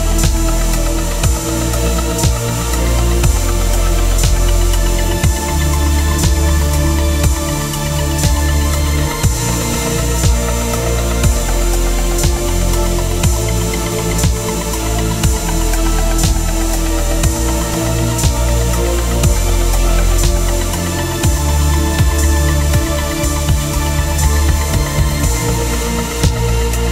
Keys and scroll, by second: 1.0 ctrl+t, 8.7 Return, 10.0 ctrl+[, 17.9 ctrl+t, 23.0 Return, 23.3 ctrl+[, 24.2 Right, 24.9 Down, 25.4 Left, 25.7 Down.